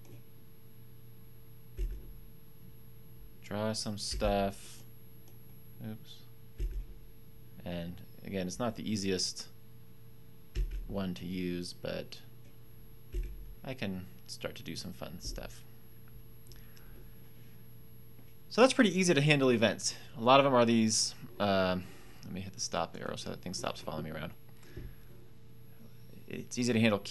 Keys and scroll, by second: 1.7 Up, 4.0 Down, 6.5 Up, 10.5 Down, 13.1 Up.